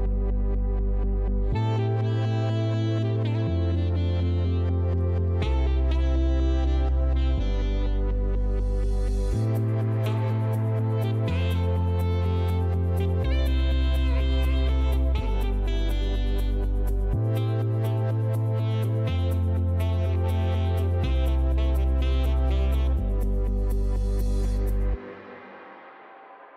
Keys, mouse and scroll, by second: 0.8 click, 1.2-2.0 typing, 3.2 click, 3.3-4.3 typing, 5.5 middle click, 6.0 right click, 7.4 middle click, 8.0 right click, 10.0 click, 10.5 right click, 11.8 click, 12.4-26.0 typing, 16.4 click, 25.9 middle click, 26.0 scroll, 26.1 right click.